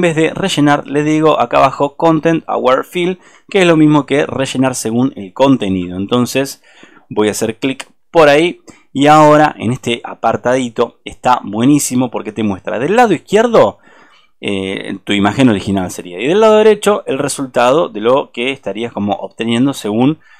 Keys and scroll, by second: 3.2 ctrl+z, 3.3 super+=, 6.0 super+-.